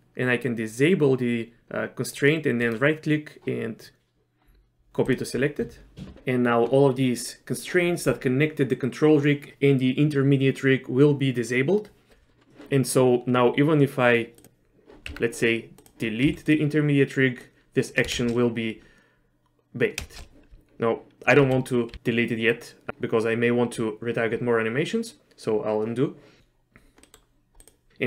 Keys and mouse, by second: 2.7-5.1 right drag, 15.1 Tab, 16.3 x, 17.5 click, 18.2 shift+space, 20.1 shift+space, 21.6 ctrl+z, 21.9 ctrl+z, 27.1 middle click, 27.6 click.